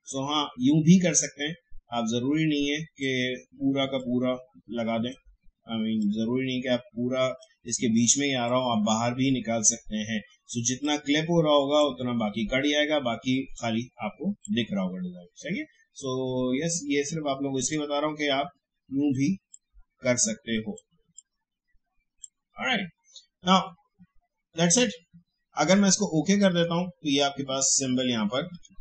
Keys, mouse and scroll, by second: 26.5 click.